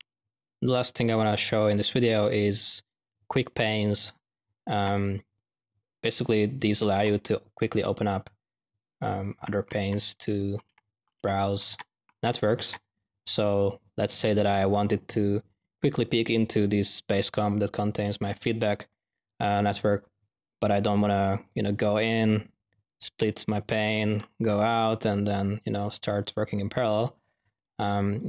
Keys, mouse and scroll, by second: 0.0 p, 8.6-9.4 typing, 13.7 click, 14.2 click, 14.4-14.9 drag, 15.3-16.6 middle drag, 18.8 click, 19.4 click, 21.4 click, 23.1 click, 23.8-24.9 middle drag, 27.5-27.9 drag, 28.1 click.